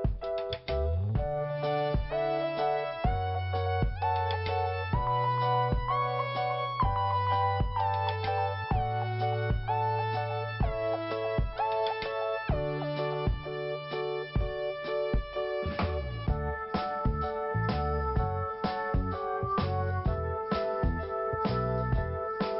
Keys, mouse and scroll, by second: 1.8-2.2 scroll down 3, 3.2 scroll up 1, 4.1 click, 7.1 scroll down 1, 7.8 scroll up 1, 8.3 scroll down 1, 13.1 click, 13.5 scroll up 2, 14.4 click, 15.5 click, 16.9 click, 18.1 click, 19.8-20.2 scroll down 1, 20.9-21.4 scroll up 1, 21.6 click.